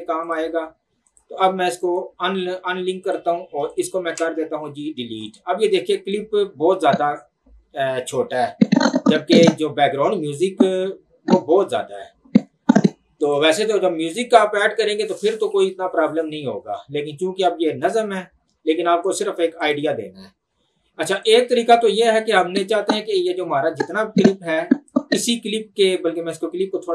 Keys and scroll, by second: 4.2 Delete.